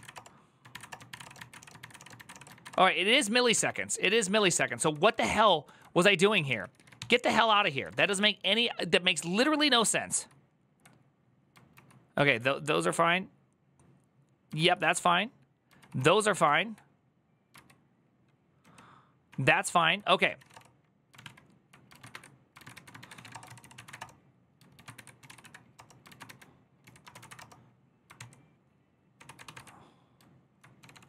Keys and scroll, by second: 0.0-3.3 typing, 1.7 Up, 2.1 Return, 2.4 shift+Up, 3.3 ctrl+o, 4.4 typing, 5.4 ctrl+j, 6.0-8.3 typing, 9.9 ctrl+k, 9.9 typing, 11.5 ctrl+k, 14.3 ctrl+k, 17.3 ctrl+k, 17.3 ctrl+u, 18.4 ctrl+d, 19.9-20.7 typing, 20.9 ctrl+w, 21.0 ctrl+o, 21.9-27.5 typing, 23.7 Up, 23.8 Return, 27.9 ctrl+t, 28.9 ctrl+d, 29.0 ctrl+u, 30.3-31.0 typing.